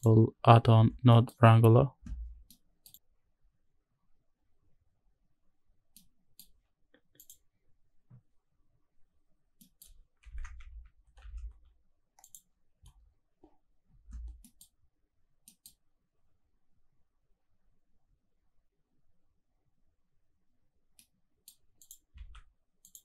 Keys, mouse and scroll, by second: 1.8-2.3 scroll down 1, 4.0 middle click, 4.0-5.9 scroll down 1, 5.9 middle click, 7.8 click, 8.9-9.4 scroll up 3, 9.6-10.1 middle drag, 15.1-16.5 scroll down 1, 16.5 middle click, 16.5-18.3 scroll down 1, 21.0 middle click, 21.8 click, 22.3 shift+d, 22.8 click.